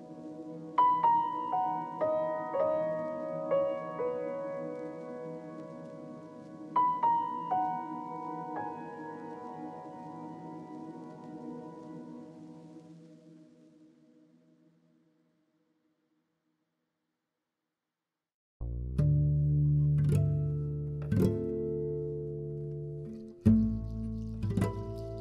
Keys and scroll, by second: 19.0 z, 23.4-25.2 typing.